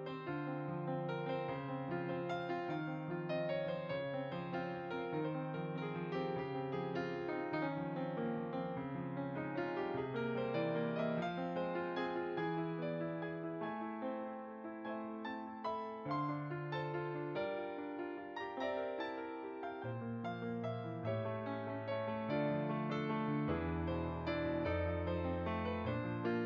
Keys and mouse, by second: 2.2 click, 6.2 g, 7.0 click, 7.6 s, 8.2 click, 8.6 g, 9.6 click, 12.0 click, 14.3 g, 16.1 click, 17.7 r, 18.8 click, 22.3 s, 23.3 click, 25.3 s, 26.0 click.